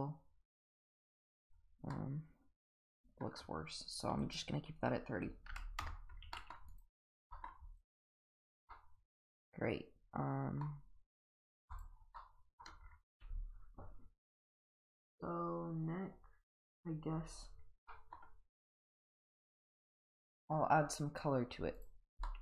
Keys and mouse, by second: 1.9-3.2 middle drag, 4.2-5.9 drag, 6.3 middle drag, 7.3 middle click, 7.8 click, 8.2 click, 8.7-10.6 middle drag, 11.2 click, 11.7 click, 12.2-12.6 middle drag, 17.9 middle drag, 22.2 shift+middle drag.